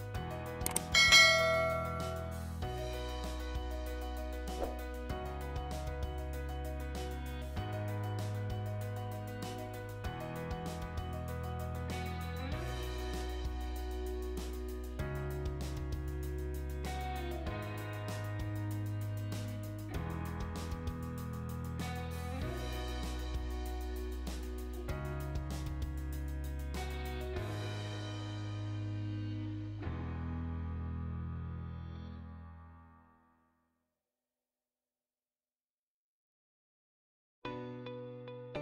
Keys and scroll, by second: 4.0 Escape, 8.1 space, 11.1 Escape, 12.1 Escape, 12.3-14.1 typing, 17.1 space, 17.9 Escape, 21.0-21.9 typing, 25.0 space, 27.1 space, 30.7 d, 30.9 space.